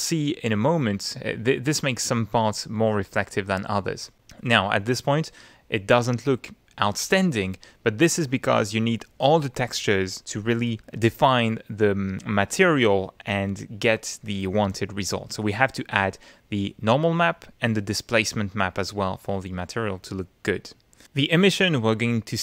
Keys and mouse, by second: 0.4 middle click, 2.7 middle click, 5.3 click, 6.2-8.0 middle drag, 12.2 middle click, 13.5 middle click, 16.6 click, 17.3 click, 20.0 click, 21.6 click.